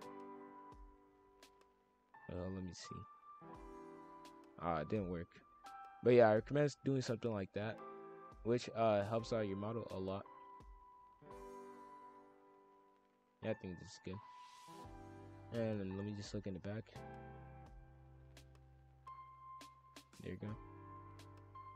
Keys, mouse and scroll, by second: 1.4 shift+f, 2.9 click, 3.7 shift+f, 6.3-9.3 drag, 9.9 click, 12.5 click, 13.0 shift+f, 17.1 click, 17.7 click, 18.0 shift+f, 19.5 click, 19.9 shift+f, 21.2 click.